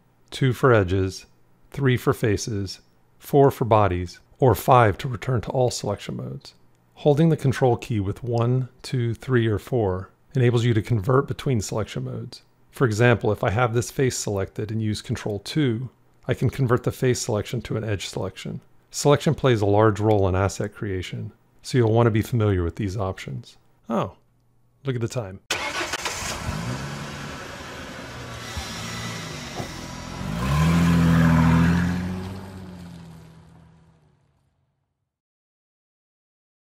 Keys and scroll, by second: 1.5 3, 3.1 4, 4.2 5, 15.0 ctrl+2.